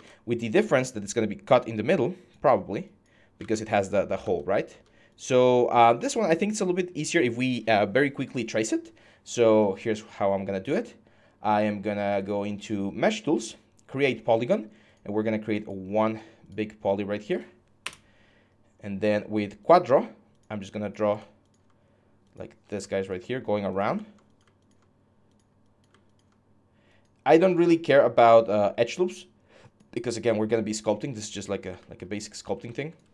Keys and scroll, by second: 3.2 alt+Tab, 4.0 alt+Tab, 17.6 Return, 18.3 5, 31.5 q.